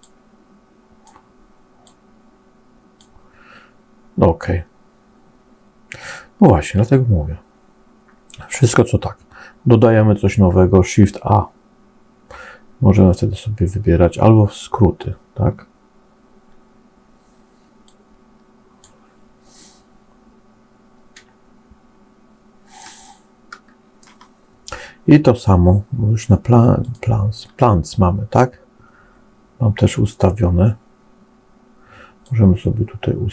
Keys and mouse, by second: 0.0 click, 1.7-2.8 drag, 10.2 shift+a, 17.9 click, 22.8 shift+middle click, 22.9 shift+click, 22.9 shift+middle click, 23.1 shift+click, 23.5 middle click, 26.8 click, 32.2-33.3 drag.